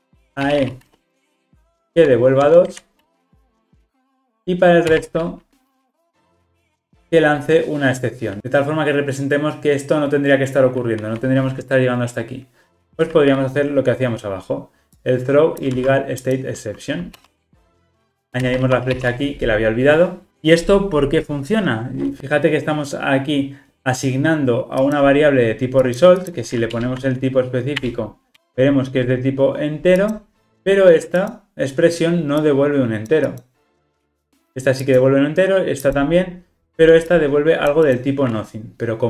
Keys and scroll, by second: 7.0 Return, 15.7 super+c, 17.4 super+v, 26.8 alt+Return, 28.4 Return.